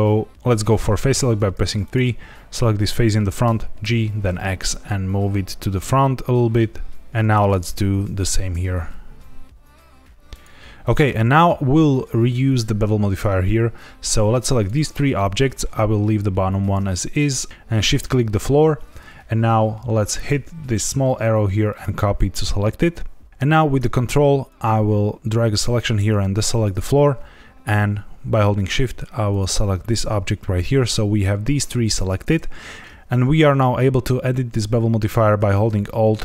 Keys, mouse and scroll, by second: 1.1 3, 1.8 click, 3.4 g, 3.7 x, 7.1 Tab, 7.1 click, 7.3 Tab, 7.6 click, 8.1 g, 8.4 x, 10.2 click, 10.7 Tab, 14.0 shift+click, 14.6 shift+click, 17.5 ctrl+z, 17.9 shift+click, 20.1 click, 22.8-23.1 scroll up 2, 23.3 ctrl+z, 24.4 ctrl+click, 29.2 shift+click, 30.3-32.3 scroll up 1, 35.8 alt+shift+click.